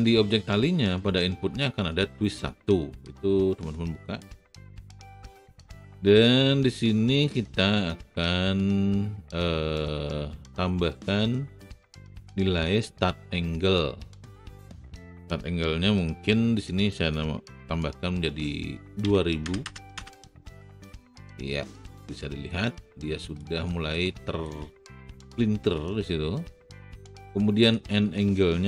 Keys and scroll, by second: 19.0 KP_2, 19.4 KP_0, 19.9 n.